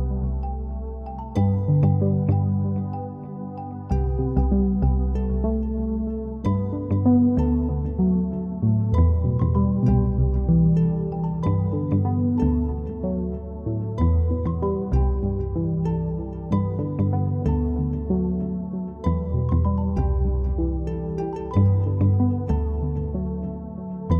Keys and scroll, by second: 0.0 typing, 2.9 typing, 10.7-12.1 typing, 14.9 typing, 23.5-24.1 typing.